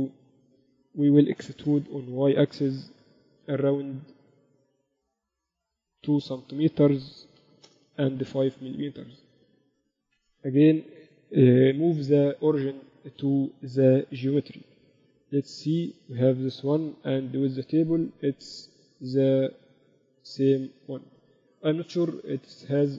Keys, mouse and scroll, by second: 0.2 a, 1.8 e, 9.0 z, 9.4 z, 10.0 Tab, 15.0 KP_2, 15.2 KP_6, 16.0 KP_2, 16.2 KP_2, 16.9 KP_Divide, 18.4 KP_6, 18.8 KP_8, 19.5 KP_4, 20.7 KP_6, 21.1 KP_6.